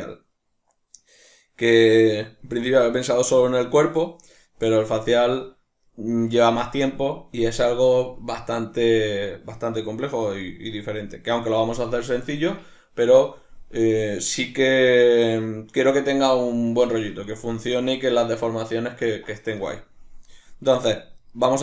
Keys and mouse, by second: 21.2 right drag.